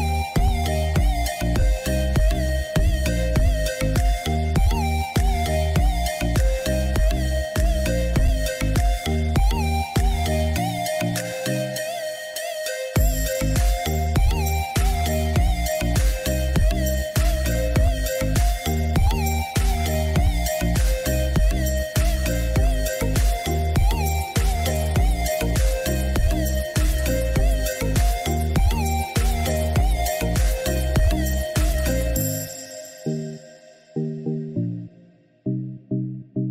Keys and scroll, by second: 8.6 ctrl+-, 17.1 ctrl+j.